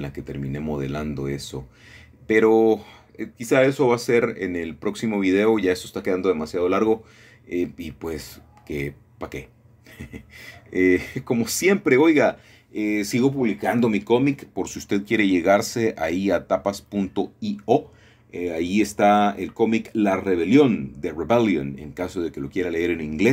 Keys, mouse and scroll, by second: 3.3 middle click, 4.8-8.1 middle drag, 8.4 middle click, 8.4-9.1 scroll down 1, 8.9 KP_0, 12.2-13.8 middle drag, 15.2 ctrl+alt+KP_0, 17.0 click, 18.1 g, 19.8 click, 21.2-22.3 scroll down 1, 22.4 click.